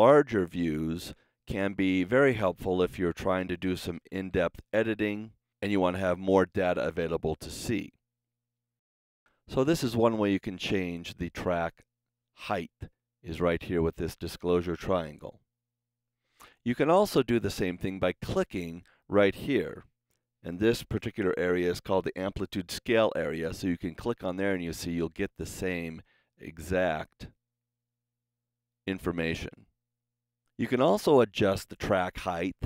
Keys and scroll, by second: 4.1 t.